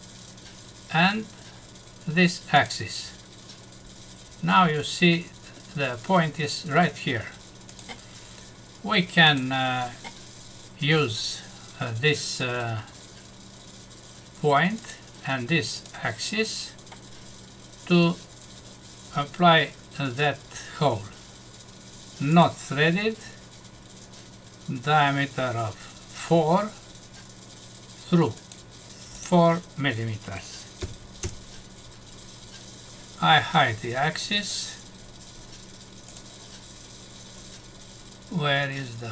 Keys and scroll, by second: 31.2 Return.